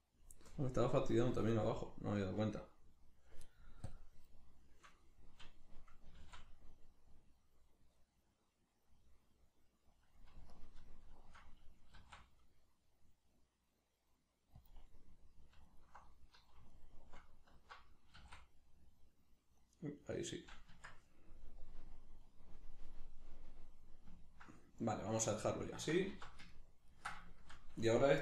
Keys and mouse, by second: 6.1 s, 10.5 alt+right click, 11.9 s, 14.7 click, 15.6 alt+right click, 16.7 alt+right click, 18.1 s, 20.3 right click, 20.7 Tab, 21.6-23.0 drag, 23.0-28.2 middle drag, 26.1 alt+q.